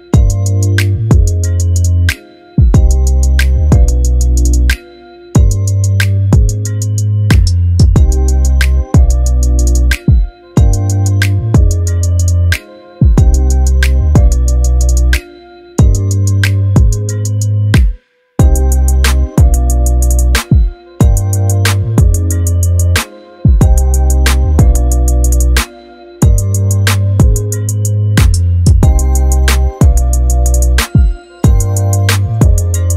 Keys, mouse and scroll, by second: 0.3-3.1 drag, 3.5 middle click, 4.8-7.3 drag, 10.6-13.3 drag, 23.5 middle click, 25.5-26.4 scroll down 1, 27.6-29.2 drag, 29.4-30.6 scroll up 1, 30.6-31.6 scroll down 1, 31.6-32.8 drag.